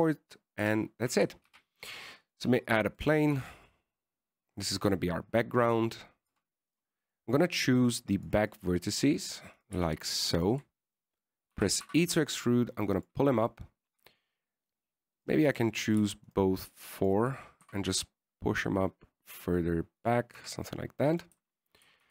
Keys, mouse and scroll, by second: 1.9 KP_1, 2.8 shift+a, 4.1-4.6 scroll down 2, 4.3 middle click, 4.6 s, 6.7 middle click, 7.6 Tab, 7.6-8.0 scroll down 3, 8.0 right click, 8.3 middle click, 8.6-9.4 scroll up 1, 9.4 click, 9.4-9.8 scroll up 2, 9.8 click, 10.3 middle click, 10.9 right click, 11.7 shift+right click, 12.8 e, 15.2 right click, 15.8 shift+middle click, 16.5 shift+right click, 16.7 shift+middle click, 17.2 scroll down 1, 17.6 shift+right click, 18.3 shift+right click, 18.9 g, 21.7 Tab, 21.9 middle click.